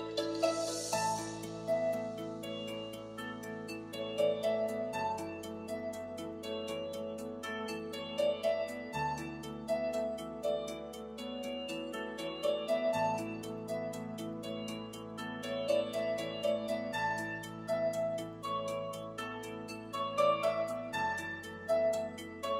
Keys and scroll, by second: 13.2 BackSpace.